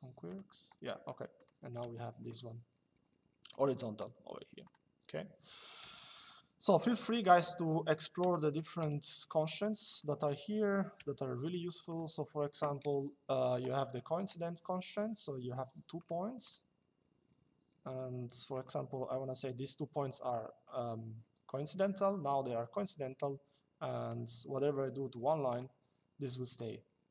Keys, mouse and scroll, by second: 1.1 click, 1.6 Escape, 4.3 click, 5.5 Delete, 6.9 click, 7.0 Delete, 7.5 click, 9.9 Escape, 10.7 l, 11.8 Escape, 13.9 click, 15.7 click, 18.2 click, 22.6 Escape, 23.8 click, 26.3 click.